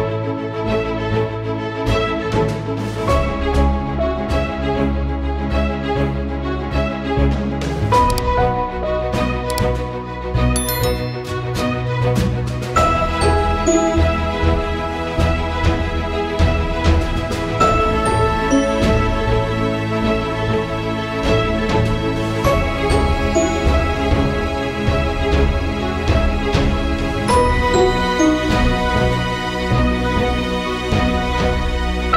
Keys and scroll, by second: 2.5 ctrl+alt+2.